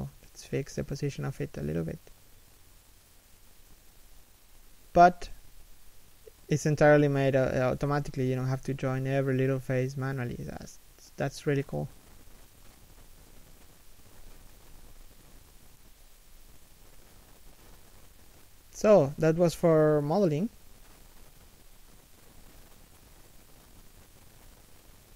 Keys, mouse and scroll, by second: 0.4 right click, 0.6 g, 1.0 right click, 1.1 g, 3.1 z, 3.8 middle click, 5.0 z, 5.2 right click, 5.8 1, 6.4 g, 7.2 a, 10.5 z, 11.2 right click, 11.3 g, 11.9 a, 13.8 l, 14.6 x, 15.2 shift+middle click, 15.5 z, 15.6-16.7 scroll up 1, 16.7 shift+middle click, 16.9 scroll up 1, 17.8 z, 18.2 shift+middle click, 18.8-19.3 scroll down 1, 19.3 shift+middle click, 19.8 z.